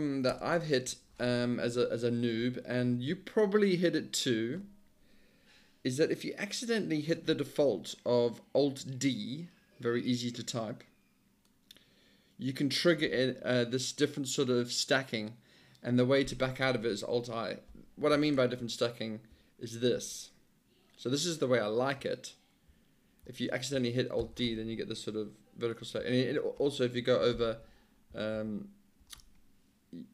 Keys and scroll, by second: 0.3 Return, 0.9 j, 1.7 Page_Down, 2.4 Down, 2.9 Page_Down, 18.3 alt+shift+Return, 20.0 alt+i, 24.2 alt+d, 27.3 alt+i, 28.4 alt+i.